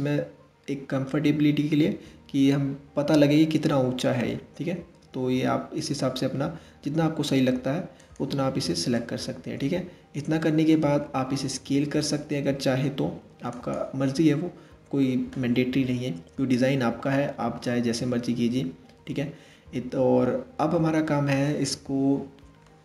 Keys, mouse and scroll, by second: 8.6-11.1 middle drag, 11.1 s, 13.7-16.8 middle drag, 17.3-20.3 middle drag.